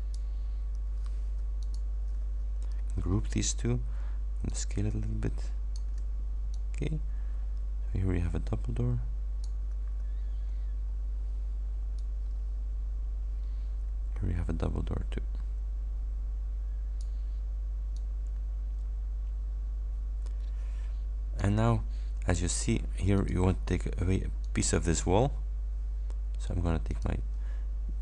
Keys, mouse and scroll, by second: 1.7 ctrl+shift+click, 2.9 ctrl+g, 4.5-6.1 ctrl+drag, 6.6-9.7 drag, 10.5 ctrl+d, 10.9 ctrl+scroll down 2, 12.1-17.3 ctrl+drag, 18.0-21.7 ctrl+drag, 23.2 click, 24.5 click, 26.9 click.